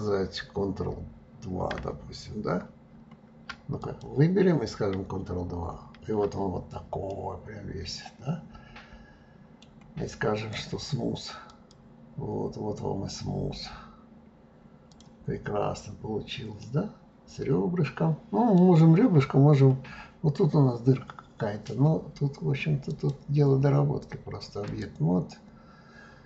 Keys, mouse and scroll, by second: 2.7 ctrl+2, 3.8 click, 5.7 ctrl+2, 7.1-10.1 middle drag, 10.4-12.8 right drag, 12.8-14.9 scroll down 2, 14.9 click, 15.4-16.0 scroll down 2, 16.0-16.6 scroll up 2, 16.6-18.9 middle drag, 18.9-22.1 scroll up 7, 22.9 click, 24.7-26.2 drag.